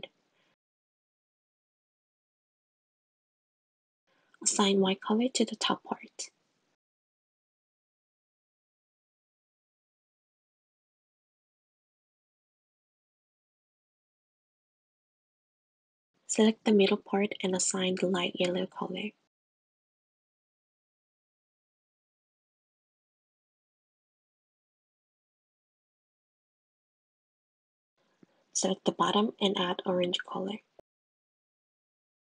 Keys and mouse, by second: 0.9 click, 3.6 click, 7.0 click, 9.1 shift+click, 11.5 click, 12.5 g, 13.3 s, 14.6 3, 14.9 click, 17.8 drag, 25.1 click, 25.7 click, 25.9 click, 27.4 click, 28.1 click, 29.8 click, 30.2 click, 31.2 click.